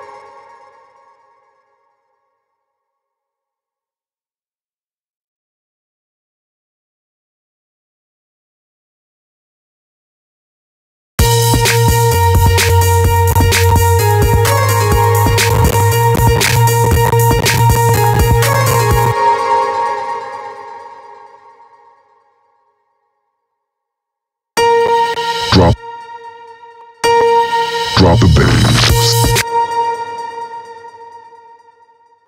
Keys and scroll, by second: 10.6 space, 19.0 space, 23.9 space, 28.8 space.